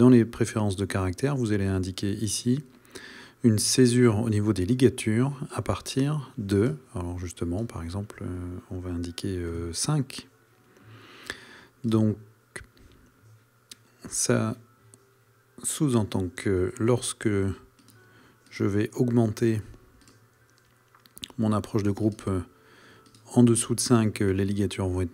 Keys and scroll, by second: 9.5 KP_5.